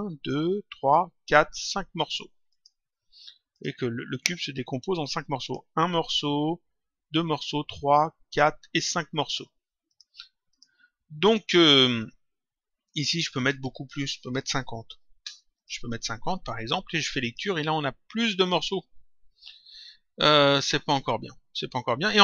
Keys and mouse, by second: 2.4 click, 5.3 click, 9.8 click, 13.3 click, 15.5 click, 17.2 click, 21.9 click.